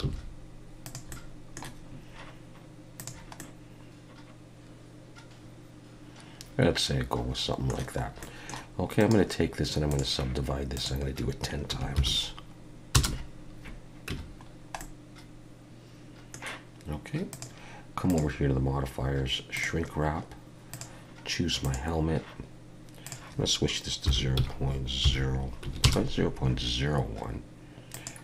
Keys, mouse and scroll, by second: 0.0 g, 1.1 middle click, 3.0 click, 3.4 middle click, 8.0 scroll up 1, 8.2 middle click, 9.0 right click, 10.7 click, 14.1 Tab, 14.5 scroll down 1, 14.8 middle click, 17.3 click, 18.1 click, 20.7 click, 23.0 click, 27.9 click.